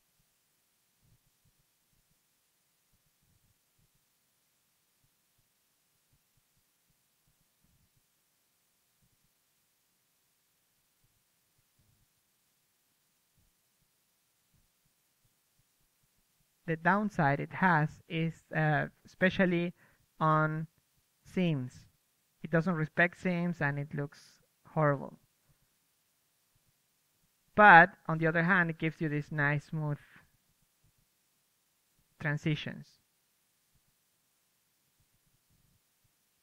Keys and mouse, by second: 5.6-10.9 middle drag, 12.3 middle drag, 14.3 KP_3, 14.7-19.2 drag, 20.1-27.5 drag, 25.7-29.0 middle drag, 27.2 ctrl+z, 27.7-36.4 drag, 32.9 middle click, 33.7 KP_3, 35.6 f.